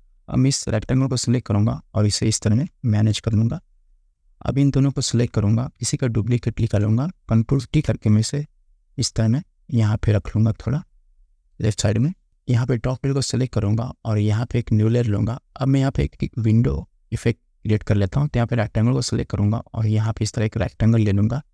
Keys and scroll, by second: 0.8 ctrl+t, 3.2 Return, 6.5 ctrl+j, 7.7 ctrl+t, 11.9 Return.